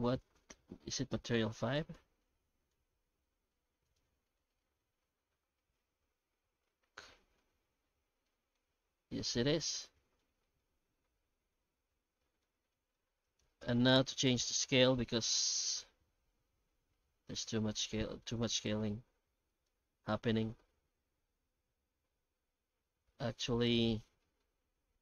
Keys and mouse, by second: 1.9 alt+x, 8.2-8.5 middle drag, 9.2 alt+shift+z, 10.0 middle click, 11.3 alt+h, 11.9 alt+a, 12.4 middle click, 13.2 right click, 17.0-17.7 shift+middle drag, 18.0 middle click, 24.4-25.0 middle drag.